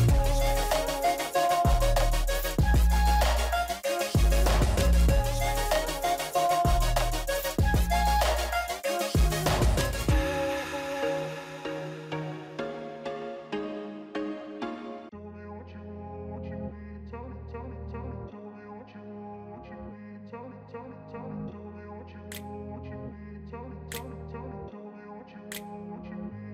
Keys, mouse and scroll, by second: 0.6 ctrl+t, 6.9 double click, 9.5 shift+click, 10.9 ctrl+z, 19.8 double click, 21.0 ctrl+-, 21.4 ctrl+-, 22.1 ctrl+-, 22.4 ctrl+=, 22.7 ctrl+=, 24.0-24.6 scroll up 2, 25.5 right click.